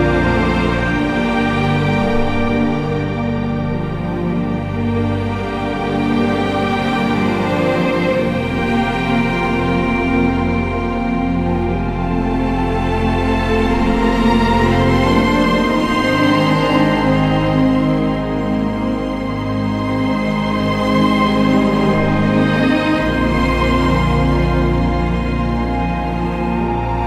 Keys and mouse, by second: 5.6 KP_3, 6.1 Tab, 6.9 alt+z, 8.8 z, 10.9 ctrl+KP_Add, 11.0 ctrl+KP_Add, 11.1 ctrl+KP_Add, 11.6 g, 11.8 y, 13.5 click, 13.6 alt+z, 15.8 click, 16.7-18.5 ctrl+KP_Add, 19.1 shift+d, 19.5 Escape, 20.5 g, 20.7 y, 26.0 click.